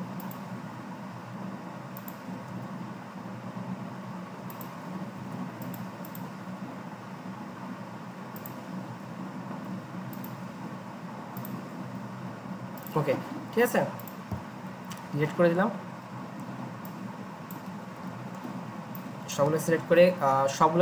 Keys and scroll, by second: 0.7 i, 2.4 v, 3.7 i, 5.2 v, 6.5 i, 9.5-11.7 typing, 14.8 Delete, 18.0 Delete.